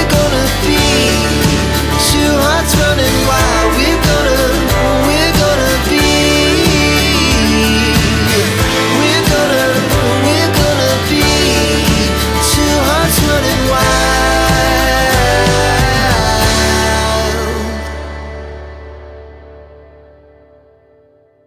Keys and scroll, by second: 6.9 t, 7.0 space, 16.7 t, 16.9 space.